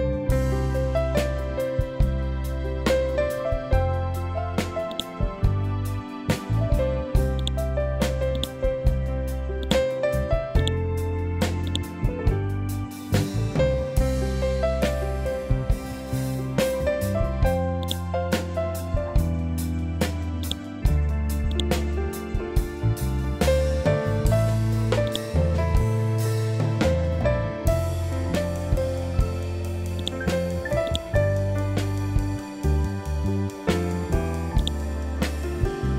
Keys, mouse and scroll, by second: 1.4-2.1 scroll down 1, 4.8-10.5 drag, 12.5 scroll down 1, 14.5 scroll up 1, 17.7-24.7 drag, 25.0-27.8 drag, 27.8 ctrl+z, 29.9-34.3 drag, 34.5-35.9 drag.